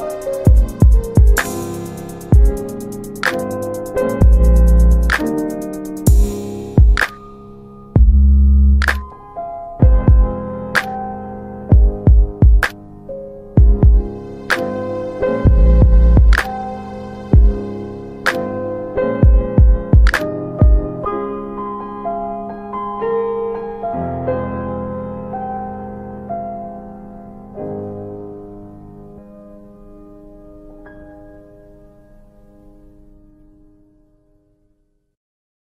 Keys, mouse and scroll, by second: 0.7 F4, 1.3 middle click, 1.4 scroll down 2, 2.3 alt+middle click, 4.2 click, 7.1 middle click, 7.6 F4, 9.5 m, 11.0 click, 12.1 click, 16.8 alt+middle click, 17.1 click, 17.7 middle click, 20.1 right click, 22.1 click, 23.1 alt+w, 23.9 alt+w, 24.2 alt+w, 26.1 scroll down 2, 27.1 click, 27.5 double right click, 30.5 click, 32.9 right click, 35.1 click.